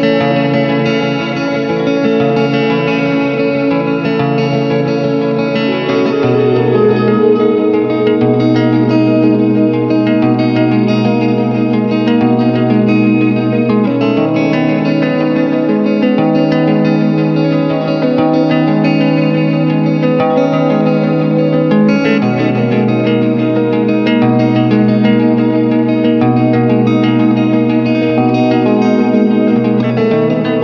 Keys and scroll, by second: 0.7 alt+i, 0.8 alt+a, 1.3 ctrl+space, 2.2 shift+F2, 3.0 w, 4.3 Return, 5.0 shift+F2, 5.3 ctrl+d, 7.5 Return, 8.2 ctrl+m, 9.5 Return, 10.2 ctrl+space, 10.6 g, 11.4 Return, 14.9 s, 15.2 ctrl+space, 16.1 ], 18.2 r, 19.0 ], 24.4 space, 30.4 space.